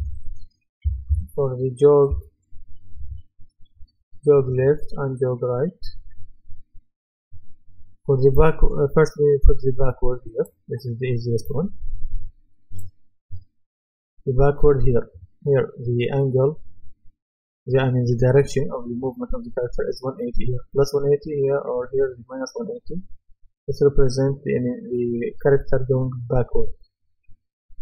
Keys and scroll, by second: 0.8-2.1 typing.